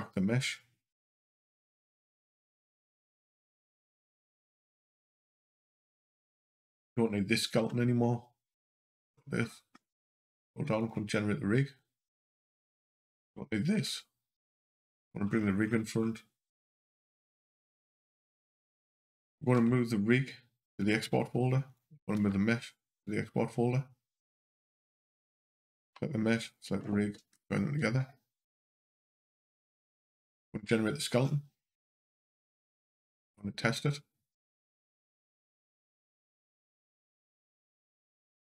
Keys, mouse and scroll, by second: 1.4 scroll down 2, 4.8 click, 6.2 click, 7.4 h, 8.4 click, 8.9 scroll down 2, 10.6 click, 12.5 click, 13.6 h, 14.4 click, 15.1 scroll up 2, 17.9 click, 19.3 m, 21.5 click, 22.0 m, 24.0 click, 24.9 click, 26.2 shift+click, 27.1 ctrl+p, 29.8 scroll down 2, 32.4 click, 33.0 g, 35.8 click, 36.8 g.